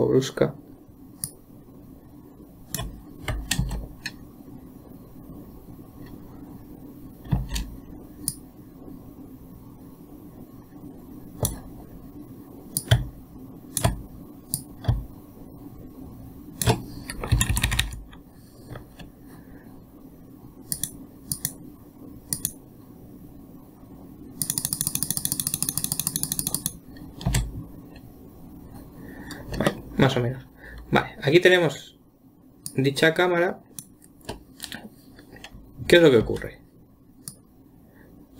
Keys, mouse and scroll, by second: 4.0 space, 7.8 space, 8.7-11.8 drag, 13.2-14.2 drag, 15.0 click, 17.8 Right, 18.0 Right, 21.2 Left, 21.2 click, 21.7 Left, 21.7 click, 22.7 Left, 22.7 click, 24.9-25.6 Left, 24.9-27.7 drag, 25.7 Left, 25.9 Left, 26.5 Left, 26.7 Left, 26.8 Left, 27.7 space, 30.1-33.1 middle drag, 33.1-36.2 drag, 36.7 space, 37.7-38.3 drag.